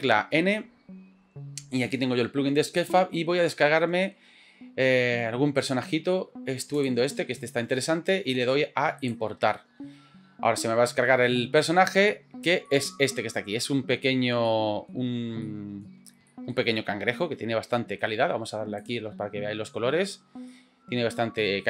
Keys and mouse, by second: 1.9 click, 2.9-6.9 drag, 12.7-13.4 middle drag, 14.1 shift+middle drag, 14.5 middle click, 15.4-15.9 shift+middle drag, 16.3 shift+middle drag, 16.7-18.0 middle drag, 19.3-20.0 drag, 20.5-21.6 middle drag.